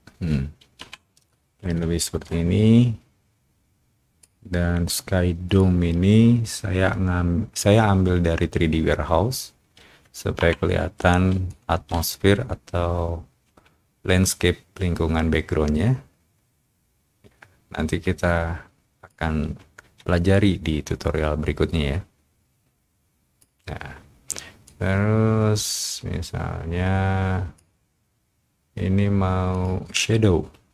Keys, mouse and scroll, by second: 0.7 o, 1.2 click, 1.5 o, 2.3 click, 2.7 click, 4.0 click, 5.4 shift+click, 11.0 shift+middle click, 11.0 o, 11.4-13.8 shift+drag, 11.8 shift+middle click, 15.2-19.0 drag, 20.2-23.3 shift+drag, 24.6-27.5 drag, 29.5 click.